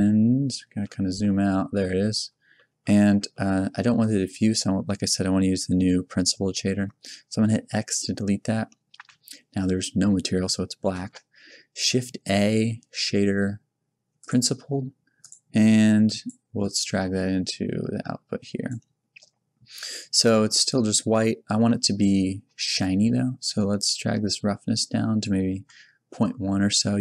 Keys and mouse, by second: 1.4-3.9 drag, 3.9-6.7 middle drag, 7.7 x, 10.9 shift+a, 16.0 click, 18.8 click, 26.7-27.0 middle drag.